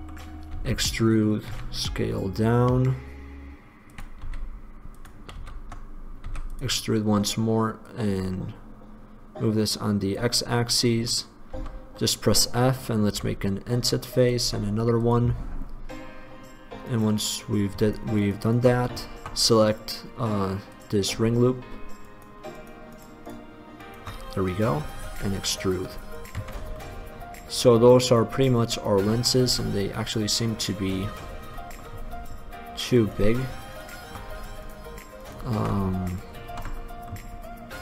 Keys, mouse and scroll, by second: 0.0 middle click, 0.7 e, 1.7 s, 4.4 e, 5.4 click, 5.6 ctrl+z, 6.4 ctrl+x, 6.4 e, 6.8 click, 11.7 f, 13.3 i, 14.7 i, 20.9 right click, 22.2 right click, 25.2 e, 26.3 click, 26.6 Tab, 26.9-28.3 drag, 28.9 middle click, 29.7 Tab, 31.1 click, 33.2-37.0 right drag, 37.0 middle click, 37.2 click.